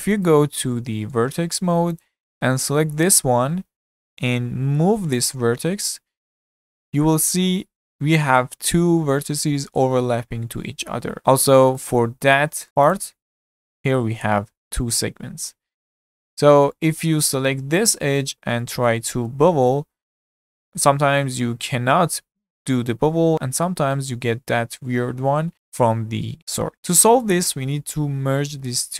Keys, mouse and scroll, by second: 1.1 1, 2.0 click, 3.0 click, 3.8-5.7 middle drag, 5.7 g, 11.6-12.7 shift+middle drag, 12.7-14.0 scroll up 5, 12.9 click, 14.0 g, 15.5-15.9 scroll down 3, 15.9-17.6 middle drag, 17.6 2, 17.8 click, 18.6-19.3 shift+middle drag, 19.3 ctrl+b, 26.7-27.9 middle drag, 27.9 1, 28.6-28.9 scroll up 1.